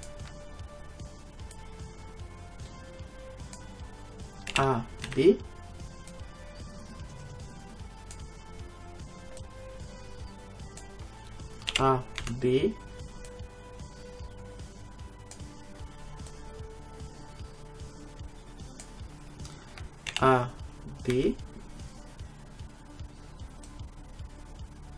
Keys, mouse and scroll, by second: 1.6-3.5 drag, 4.5 a, 5.1 b, 9.4-11.1 drag, 11.7 a, 12.2 b, 16.3-18.1 drag, 18.2 click, 20.1 a, 21.2 b.